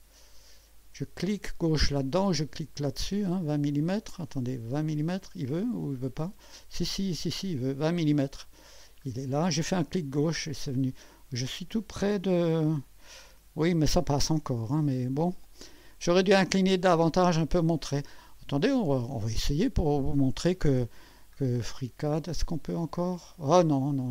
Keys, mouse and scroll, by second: 3.2 click, 4.9 click, 6.0 scroll down 2, 6.5-8.8 drag, 9.0-9.6 scroll up 2, 10.3-12.1 drag, 12.3 KP_1, 18.6 click.